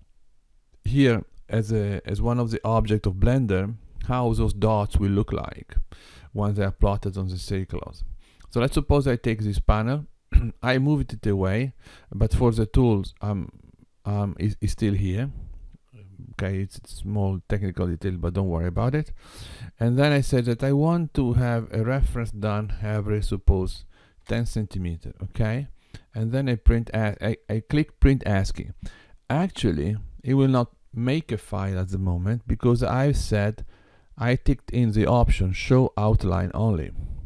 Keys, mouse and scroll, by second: 21.5 click.